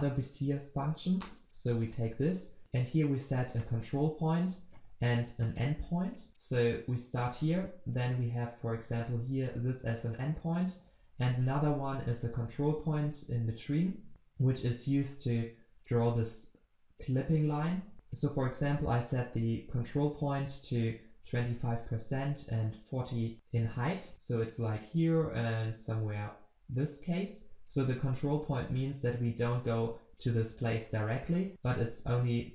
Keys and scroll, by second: 1.3 Return, 2.6 ctrl+alt+Left, 17.9 ctrl+v.